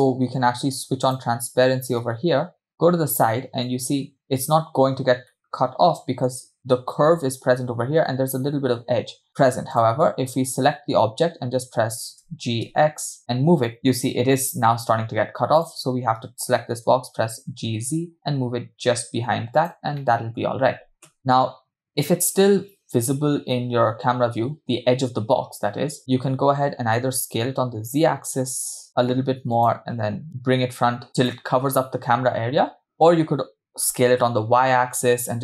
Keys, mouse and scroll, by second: 1.0 click, 2.1-4.5 middle drag, 5.4 middle click, 9.7 click, 12.4 g, 15.6 click, 16.9 g, 20.1-20.4 middle drag, 21.1 KP_0, 27.2 s, 30.3 g, 33.9 s.